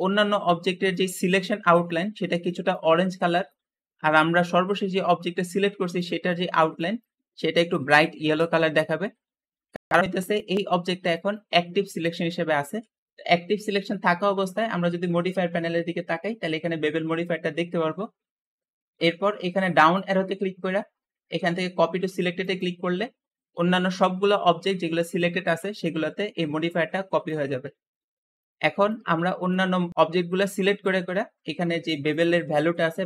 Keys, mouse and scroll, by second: 12.9 Escape, 19.7-22.7 drag, 23.1-24.5 scroll down 3, 24.5-25.1 scroll up 3, 25.1-28.7 middle drag, 28.7 shift+click, 29.1-30.5 shift+middle drag, 30.5-30.8 scroll up 1, 30.8-32.0 shift+middle drag, 32.0-33.0 shift+drag.